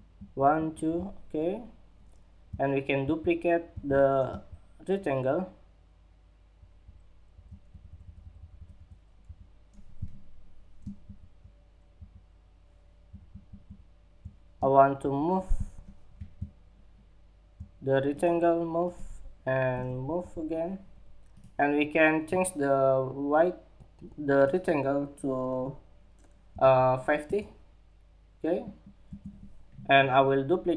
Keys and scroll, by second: 2.6 super+c, 10.6 shift+super+Up, 13.4 super+Down.